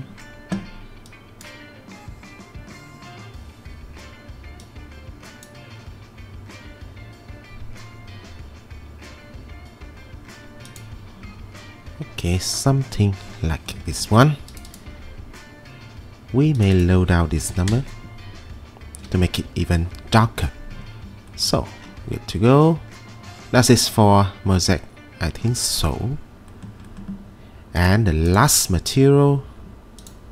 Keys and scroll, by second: 17.1-18.0 typing.